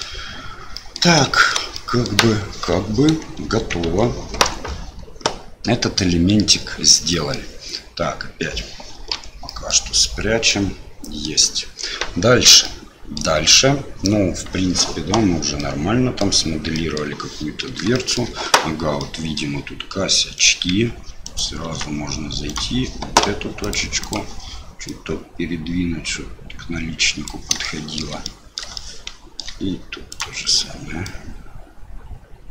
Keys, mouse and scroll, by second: 0.7 middle click, 1.4 shift+middle click, 1.8 middle click, 3.8 Tab, 7.1 middle click, 9.1 h, 9.4 middle click, 10.5 click, 10.7 middle click, 11.1 click, 12.6 click, 12.8 middle click, 15.6 middle click, 16.7 middle click, 17.9 shift+middle click, 19.0 middle click, 20.3 click, 21.2 click, 21.6 Tab, 22.5 click, 24.1 click, 24.9-27.5 drag, 27.5-30.1 shift+middle drag, 30.1 click, 31.1-32.5 drag.